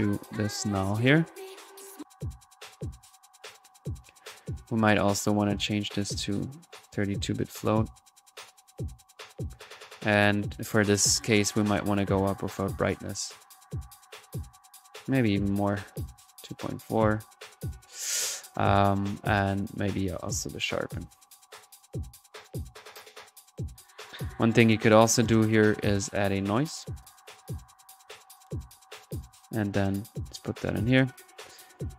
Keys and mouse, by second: 2.2 1, 5.1 drag, 6.2 drag, 6.8 click, 9.4 click, 10.5 click, 11.2 click, 12.0 click, 15.0 click, 17.7-18.0 drag, 18.1-18.6 drag, 18.9 click, 19.6 click, 20.5 click, 23.1 click, 24.3-24.8 middle drag, 24.8 drag, 25.8 right click, 26.2 click, 26.4 right click, 26.8 click, 27.0 right click, 28.1-28.8 typing, 28.8-31.2 drag, 30.6 middle click, 31.3-31.9 drag.